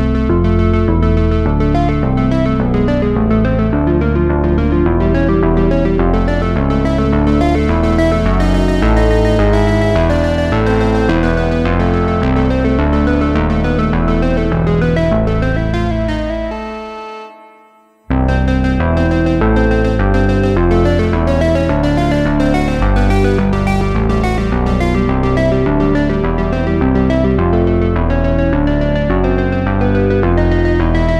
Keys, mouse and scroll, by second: 1.0 space, 2.5 Left, 3.5 click, 6.7-7.0 scroll down 3, 8.1 shift+a, 12.5 click, 18.6-19.4 drag, 19.4-20.9 right drag, 21.5 shift+a, 23.4-25.0 drag, 26.0 KP_Decimal, 26.3-27.2 scroll down 4, 27.2-28.3 drag, 28.7 click, 29.2 click, 30.5-31.0 drag.